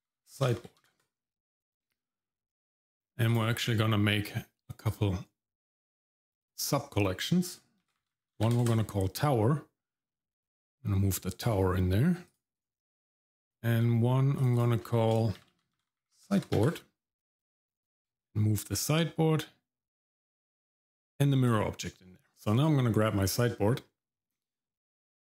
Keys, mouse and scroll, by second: 3.3 click, 3.6-4.9 drag, 3.6 right click, 6.2 click, 6.4-8.6 drag, 10.4 click, 12.3 click, 12.5 right click, 14.4 click, 14.5-16.7 drag, 18.0 click, 20.9 click, 22.3 click, 23.2 shift+middle click, 23.7 middle click.